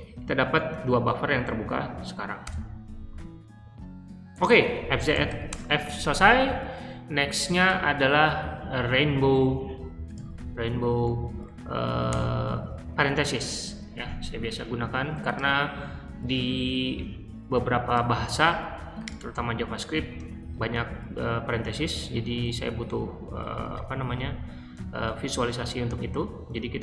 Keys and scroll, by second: 2.3 Return, 4.8-5.7 typing, 11.0 Up, 11.4 Up, 12.0 Return, 18.1 super+c, 19.9 shift+g, 22.0-26.8 typing.